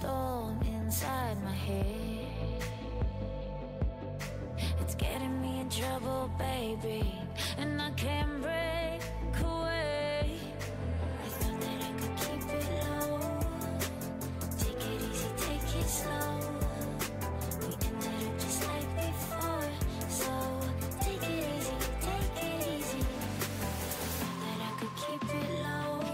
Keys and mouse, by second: 2.3-6.6 drag, 6.7 z, 8.3 z, 11.7 click, 12.5-16.8 right drag, 13.3-15.1 drag, 17.3-22.0 right drag, 22.2 x, 24.3-26.1 drag, 25.2-26.1 right drag.